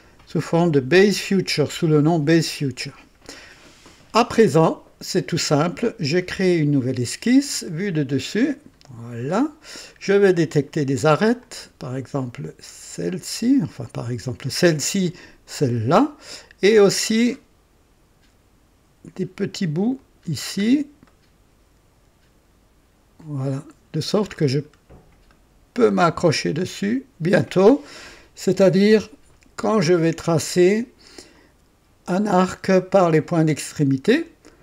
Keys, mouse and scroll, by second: 6.4 click, 7.6 click, 8.5 click, 9.3 scroll up 1, 9.9 right click, 11.4 click, 13.8 click, 15.4 click, 16.8-17.6 scroll up 4, 19.9 click, 20.6 scroll down 1, 21.0 right click, 23.2 click, 23.8-24.8 scroll down 3, 25.3 right click, 26.0-26.3 scroll up 1, 26.6 right click, 31.3 click, 34.0 click.